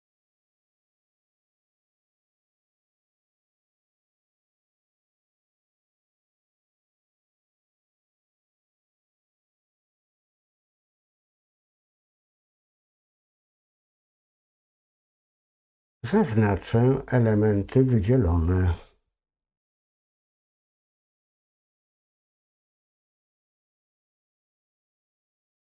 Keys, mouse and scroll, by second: 1.3-3.8 drag, 6.1-8.4 drag, 10.4 click, 11.2-15.3 middle drag, 21.1 middle click, 21.7-22.5 scroll up 1, 23.4 scroll down 1, 23.7 middle click, 25.1 l.